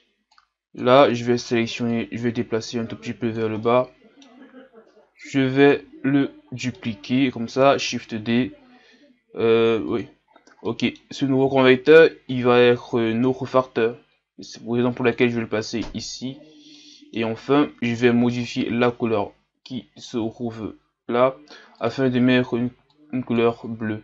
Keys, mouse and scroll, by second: 5.7 click, 7.9 shift+d, 20.1-24.0 drag.